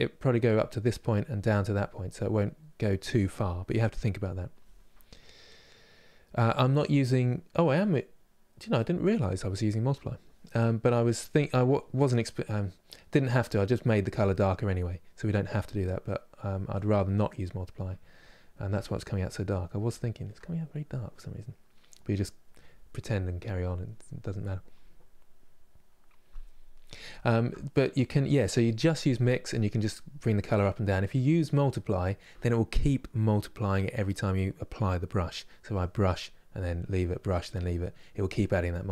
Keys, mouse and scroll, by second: 8.9-11.5 drag, 11.5-15.8 middle drag, 15.8-17.1 drag, 17.1-29.4 middle drag, 29.4-37.3 drag, 37.3-38.9 middle drag.